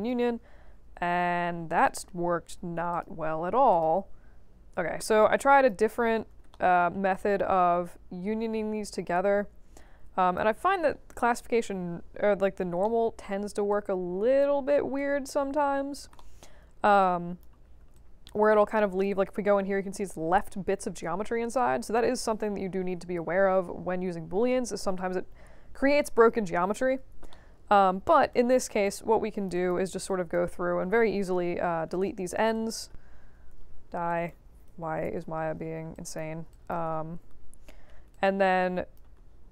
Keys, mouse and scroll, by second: 1.0-1.5 scroll up 2, 1.8 alt+middle click, 2.9 click, 3.7 click, 5.3 alt+click, 6.0 4, 6.5 alt+middle click, 7.1-10.3 alt+drag, 11.4 5, 12.2 middle click, 12.8 alt+middle click, 13.7 alt+click, 14.9-15.9 alt+drag, 16.1 alt+middle click, 16.5 alt+scroll up 2, 17.0 alt+click, 17.9-19.0 alt+drag, 21.8 3, 22.8 5, 23.2 1, 27.3 alt+middle click, 28.3 right click, 29.1-29.4 drag, 29.5 click, 30.0 click, 31.9-32.3 alt+drag, 32.5 drag, 34.0 click, 35.4-35.7 scroll down 2, 35.9 click, 36.5 shift+click, 37.7 scroll up 2, 38.1-38.9 alt+drag, 39.2 alt+middle click.